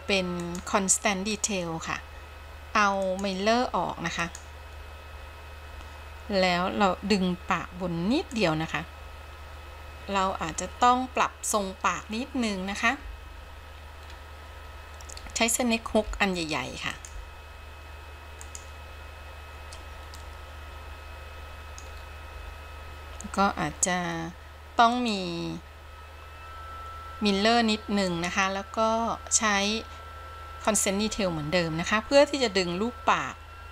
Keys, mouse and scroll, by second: 5.2 click, 8.9-10.0 drag, 10.0 middle click, 10.2-10.8 scroll up 2, 10.8-12.3 scroll down 4, 14.2 scroll up 1, 16.2 f, 17.2 f, 17.4 f, 20.3-22.0 middle drag, 22.1 scroll up 1, 25.9 click, 28.1 click, 33.2 click.